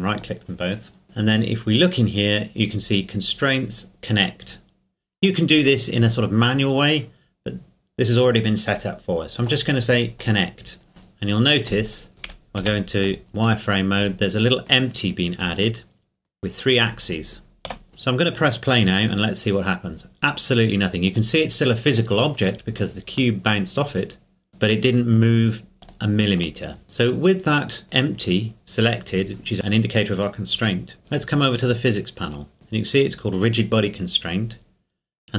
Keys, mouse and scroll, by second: 10.2 click, 11.9 right click, 12.6 z, 13.6 middle click, 17.7 z, 17.9-19.0 scroll down 2, 19.0 click, 23.4 middle click, 24.5 click, 25.8 click, 31.5 click.